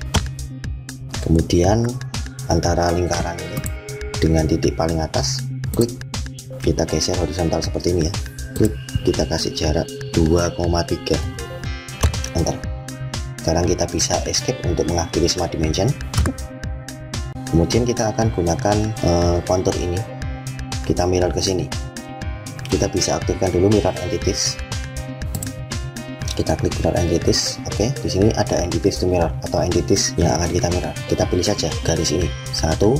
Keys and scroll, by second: 14.2 Escape.